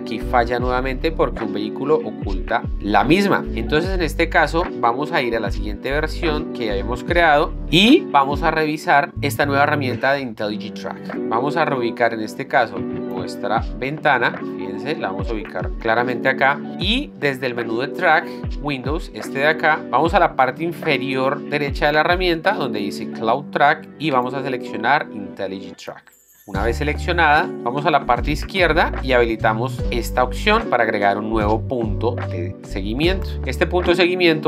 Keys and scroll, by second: 6.5 ctrl+n, 8.0 Down.